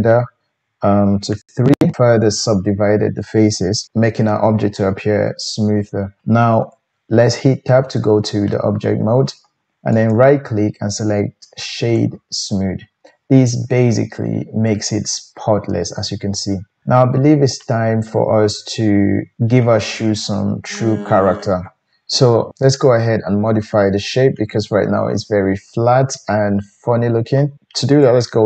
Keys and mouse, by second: 6.7 Tab, 9.9 right click, 17.1-19.1 middle drag, 28.0 Tab.